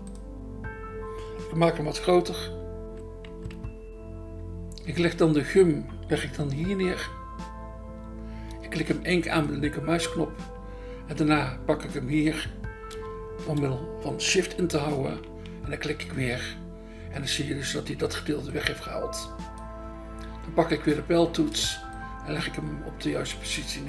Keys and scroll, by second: 3.3 ], 3.5 ], 7.0 BackSpace, 8.5 BackSpace, 13.4 BackSpace.